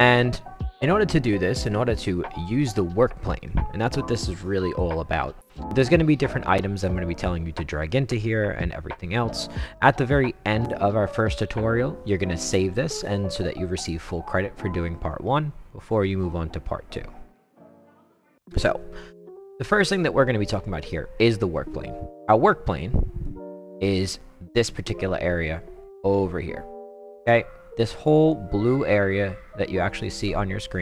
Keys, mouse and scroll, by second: 23.2-28.3 right drag.